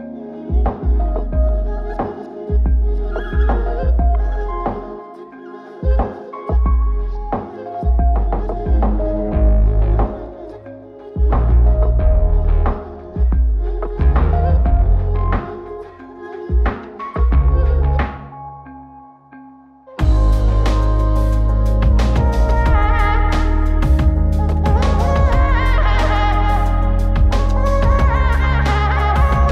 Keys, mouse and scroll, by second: 0.0-3.1 middle drag, 4.1 drag, 5.4 click, 7.7 click, 8.3-9.5 middle drag, 9.7 click, 10.1 middle click, 12.8 click, 13.4-13.7 middle drag, 17.9 click, 19.1 click, 21.1-22.2 drag, 22.3-24.1 drag, 25.7 click, 26.5 click, 27.8 click.